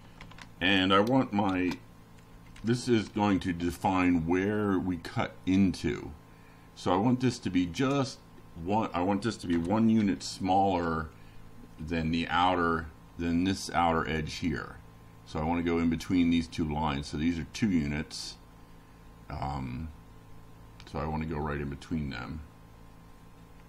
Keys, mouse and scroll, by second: 0.1 Right, 4.5 click, 6.1 BackSpace, 6.5 9, 8.1 Delete, 19.8 Right, 20.7 Right, 22.2 BackSpace, 22.7 9.